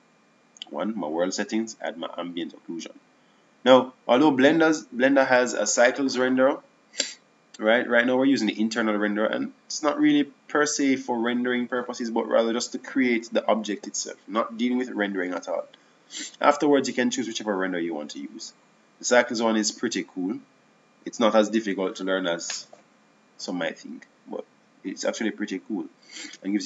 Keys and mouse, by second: 0.0 Escape, 1.0-4.1 drag, 4.3-7.0 drag, 18.6-19.9 drag, 22.3-23.5 drag.